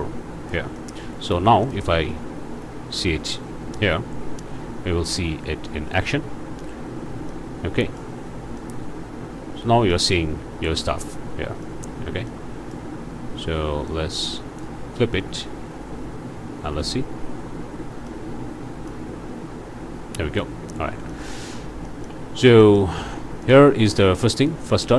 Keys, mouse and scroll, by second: 0.8 click, 1.6 ctrl+shift+click, 7.3 click, 8.2 scroll up 1, 8.6-10.1 drag, 10.8 click, 12.3 click, 13.9 click, 18.1-19.1 drag, 20.1 click, 20.6 scroll down 3, 20.8 alt+a, 21.5-21.8 alt+scroll up 3, 22.3 shift+scroll up 2, 22.5 shift+scroll down 3, 23.4 click, 24.5 r.